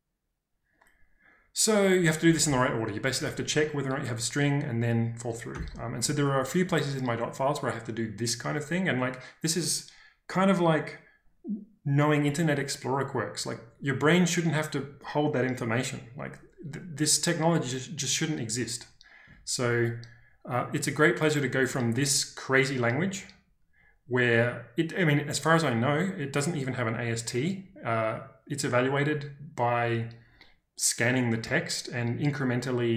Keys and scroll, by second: 2.2 k, 2.4 k, 3.0 j, 3.2 j, 5.5 n, 10.6 typing.